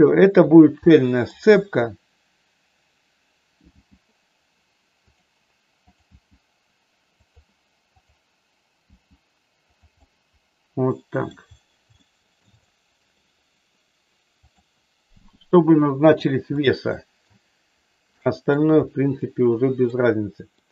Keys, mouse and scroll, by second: 1.0 middle click, 1.2 scroll down 1, 3.7 g, 5.0 click, 6.0 click, 6.3 g, 7.2 click, 8.1 click, 8.8 g, 9.7 click, 10.0-11.2 middle drag, 11.9 shift+middle click, 12.6 middle click, 15.1 g, 16.1 click, 16.6 middle click, 18.1 middle click, 19.1 middle click, 20.5 middle click.